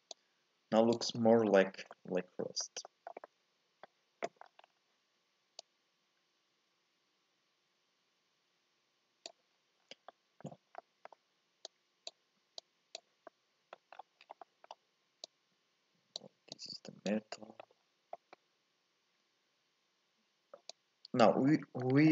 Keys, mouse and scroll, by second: 0.1-1.1 drag, 1.1-1.5 scroll down 1, 1.5 shift+middle click, 1.8 scroll up 1, 1.9-4.4 middle drag, 4.4 scroll down 3, 4.6-5.6 scroll up 5, 5.6-8.6 drag, 9.5-10.1 scroll down 4, 10.1 middle click, 10.8 scroll down 1, 11.6 click, 12.6 click, 13.3 middle click, 14.0-14.4 scroll down 4, 14.4 middle click, 15.2 click, 16.5 click, 17.3 middle click, 17.8-18.1 scroll up 1, 18.1-20.7 middle drag, 20.7 click, 21.5 middle click.